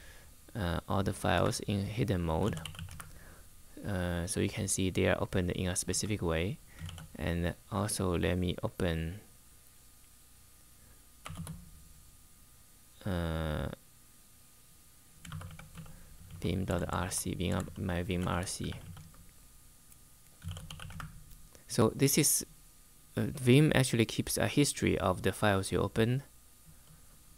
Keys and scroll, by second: 0.0-0.1 typing, 1.1 Return, 1.9-2.9 typing, 5.6 Return, 6.5 shift+;, 10.9 typing, 15.0-19.0 typing, 20.1-20.9 typing.